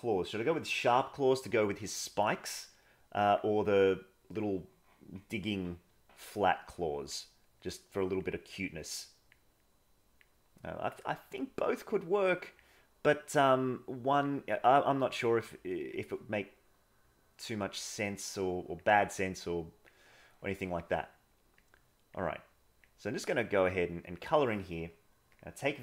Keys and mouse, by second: 2.5 click, 3.8 click, 6.2 click, 7.7 click, 8.6 click, 9.6 click, 10.5 click, 11.4 click, 12.2 click, 13.3 click, 14.8 click, 15.6 click, 17.0 click, 18.1 click, 19.2 click, 20.5 middle click, 21.6 click, 22.3 click, 23.1 click, 23.6 click.